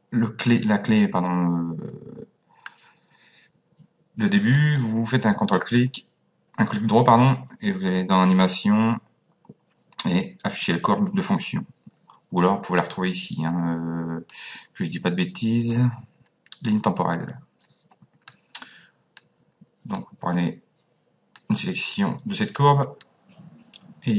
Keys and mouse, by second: 4.5 right click, 11.2 click, 14.3 click, 19.1 click, 21.3 click.